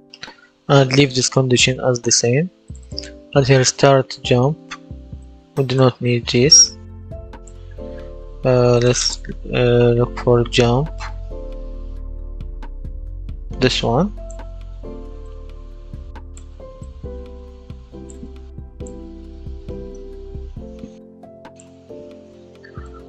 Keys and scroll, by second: 6.3 Delete, 10.0-11.5 typing.